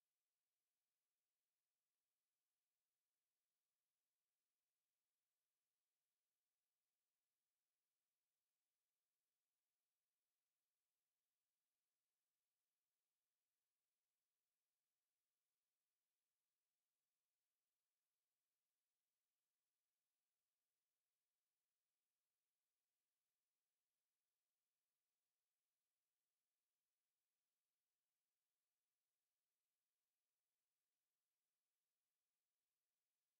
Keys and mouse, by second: 1.4 alt+click, 2.1 alt+right click, 2.5 alt+click, 2.8 right click, 4.1 alt+click, 4.6 right click, 5.5 click, 5.9 shift+click, 6.7 shift+click, 10.3 alt+click, 10.8 shift+right click, 11.9 alt+click, 12.2 alt+right click, 12.9 alt+click, 13.3 alt+click, 14.4 ctrl+click, 16.9 click, 18.8 alt+click, 19.3 alt+click, 19.7 alt+click, 20.4 alt+middle click, 21.3 click, 22.7 alt+click, 23.6 alt+click, 25.2 alt+middle click, 25.6 alt+click, 26.5 alt+middle click, 26.8 alt+click, 27.5 click, 27.9 alt+click, 29.9 alt+right click, 31.1 alt+click, 32.3 alt+click.